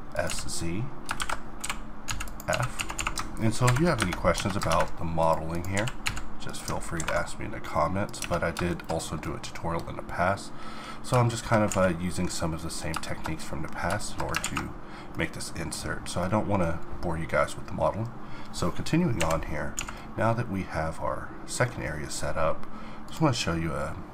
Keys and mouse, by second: 0.2 z, 1.6-3.0 typing, 3.6 ctrl+n, 4.0 Tab, 4.3 Tab, 4.9 ctrl+Tab, 5.7 click, 5.9 g, 6.5 click, 6.7 middle click, 7.0 ctrl+b, 8.2 Tab, 9.2-14.4 middle drag, 14.4 alt+a, 15.4-18.5 middle drag, 19.2 n, 19.8 a, 20.8 middle click.